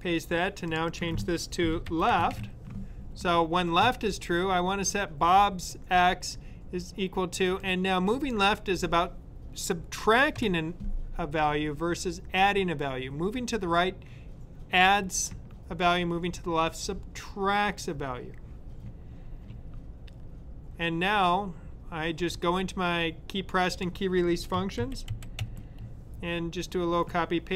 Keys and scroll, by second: 1.4-2.7 typing, 24.7 super+c, 24.7-25.8 typing.